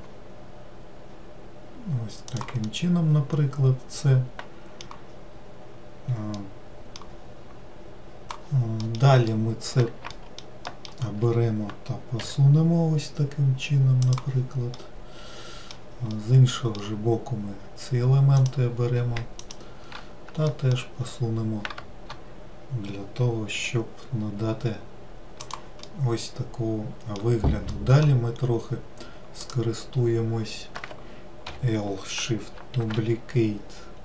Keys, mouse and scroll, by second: 2.8-5.3 middle drag, 5.3-6.5 scroll down 3, 6.5-8.7 middle drag, 9.2-10.6 middle drag, 11.1 alt+middle click, 12.6 g, 15.2-17.3 middle drag, 17.3-18.8 scroll down 1, 18.8 click, 19.8 shift+click, 20.9 alt+middle click, 22.8-24.0 scroll down 3, 24.0 g, 26.3-28.7 middle drag, 28.7-29.8 scroll up 1, 29.8 click.